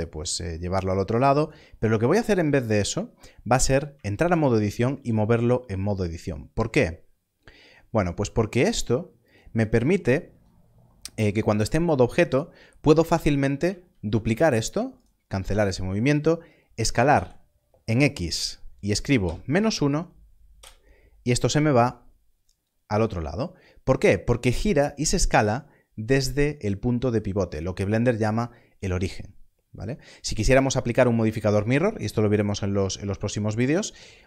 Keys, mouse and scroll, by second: 1.3 g, 3.8 right click, 9.2 click, 10.2 Tab, 13.9 shift+d, 16.7 s, 19.2 -, 19.4 1, 20.5 Return.